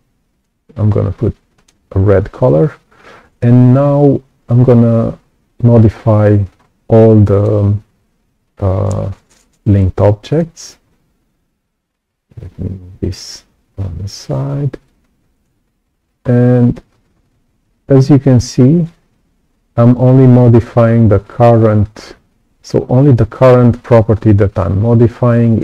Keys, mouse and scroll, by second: 1.5 right click, 6.5-6.9 scroll up 2, 7.1 right click, 10.2 alt+click, 12.4-14.8 drag, 17.6-20.4 drag, 23.0-25.5 drag.